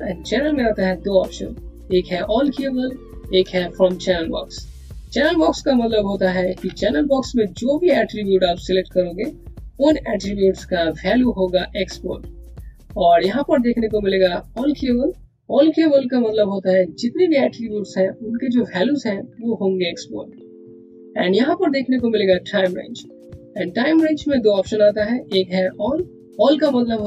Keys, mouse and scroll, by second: 6.2 click, 6.4 c, 7.7 click, 12.4 click.